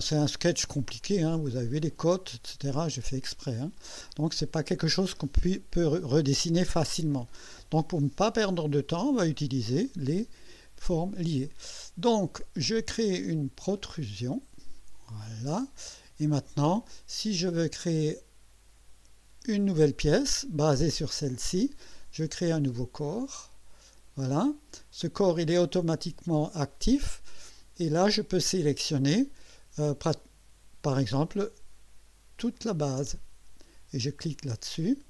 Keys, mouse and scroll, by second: 0.8 click, 3.8 click, 13.8 click, 15.3 click, 16.3 scroll down 2, 16.9-17.6 drag, 23.0 click, 32.5 ctrl+click, 34.2 click.